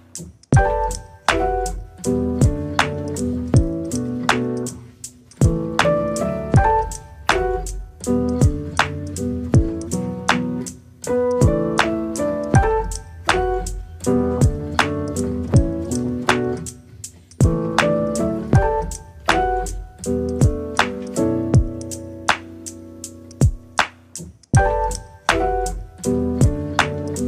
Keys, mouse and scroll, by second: 0.0-0.7 scroll down 3, 0.7-1.7 scroll down 11, 2.0-3.3 scroll down 9, 3.3-4.3 scroll up 7, 4.3-5.6 drag, 6.7 middle click, 7.6 scroll up 5, 7.9-8.4 scroll down 3, 8.4 click, 9.1-10.3 middle drag, 10.6-11.0 scroll down 7, 11.0 middle click, 11.6 KP_0, 13.7 click, 14.1 click, 15.0 click, 15.8 click, 16.5 r, 19.2 r, 19.9 r, 21.3-24.0 middle drag, 24.0 scroll up 1, 24.1-25.5 middle drag, 25.5 ctrl+s, 25.9 click, 26.4 KP_0, 27.1 click.